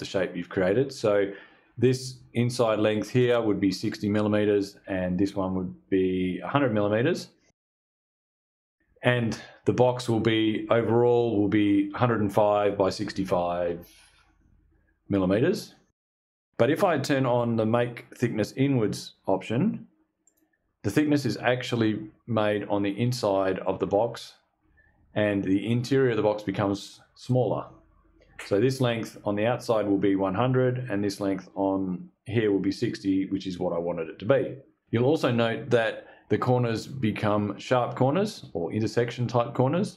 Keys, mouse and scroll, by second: 19.7 click.